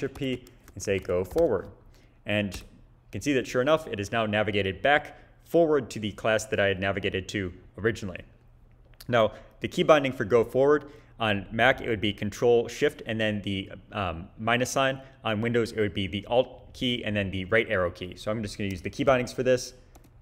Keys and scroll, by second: 0.2 shift+super+p, 0.5-1.4 typing, 2.5 Return, 19.9 ctrl+shift+-.